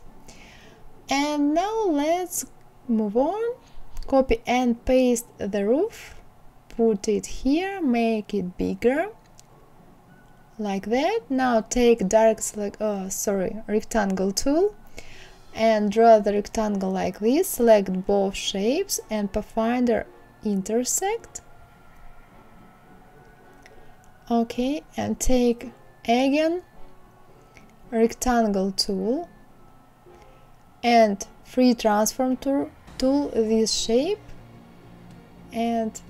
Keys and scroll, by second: 3.4 ctrl+c, 3.9 ctrl+v.